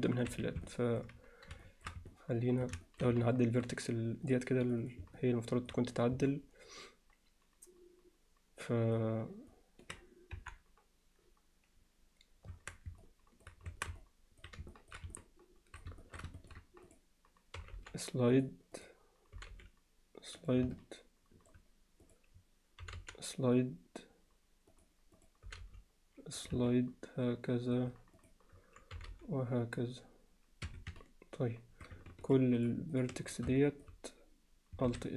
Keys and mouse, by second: 0.7 middle click, 1.6 alt+shift+middle click, 2.1 middle click, 2.9 alt+shift+middle click, 3.3 alt+middle click, 4.3 click, 4.7 click, 4.9 click, 5.2 alt+middle click, 6.3-9.0 alt+middle drag, 9.5 alt+middle click, 10.4 KP_1, 12.5 Tab, 13.0-13.5 alt+middle drag, 13.7 Tab, 14.0 alt+middle click, 14.7 ctrl+alt+middle click, 15.2 alt+middle click, 16.0 alt+shift+middle click, 16.4 ctrl+alt+middle click, 17.6 g, 18.8 click, 19.4 g, 20.8 middle click, 22.0 click, 22.8 g, 25.2 click, 25.5 g, 26.7-27.8 alt+middle drag, 28.9 g, 31.0 middle click, 33.6 alt+middle click, 34.9 alt+s.